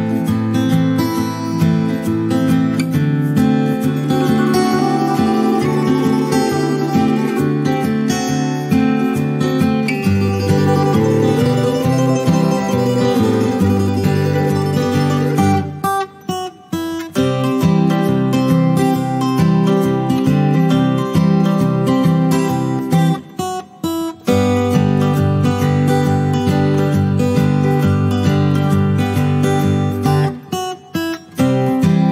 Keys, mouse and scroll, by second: 3.2 shift+h, 4.7 click, 5.3-5.8 ctrl+scroll up 1, 7.3 click, 8.0 ctrl+d, 9.3-11.7 drag, 13.2 Right, 15.6 click, 16.4 Left, 18.5-20.0 ctrl+drag, 21.0 Return, 22.2 ctrl+d, 22.8 shift+click, 23.5 shift+h, 25.8 click, 28.5 shift+click, 30.1 click.